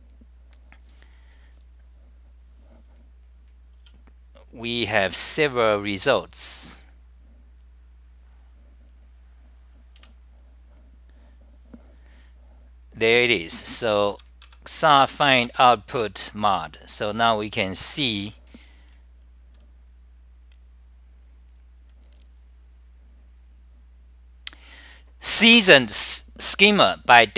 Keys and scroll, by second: 3.8 w, 4.8 ], 10.1 super+=, 14.7 a, 16.1 Return, 17.3 Left, 18.0 super+=.